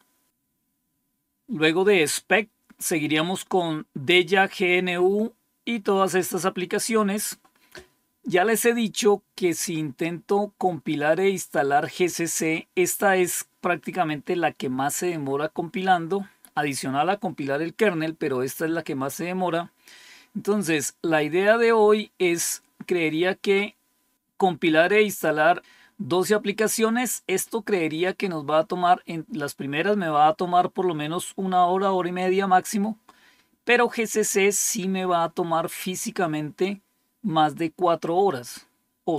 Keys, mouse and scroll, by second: 0.3-4.8 drag, 4.8-5.1 scroll down 3.